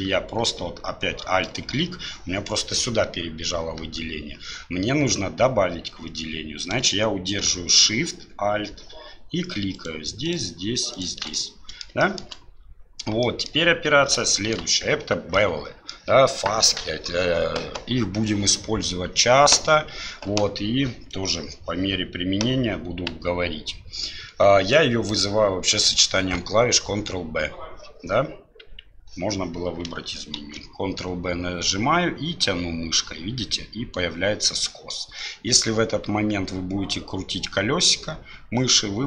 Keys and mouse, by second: 1.4-6.8 alt+drag, 11.3 middle click, 12.0 shift+middle click, 13.2 middle click, 14.3 shift+middle click, 15.3 middle click, 25.1-27.8 drag, 30.4 ctrl+b.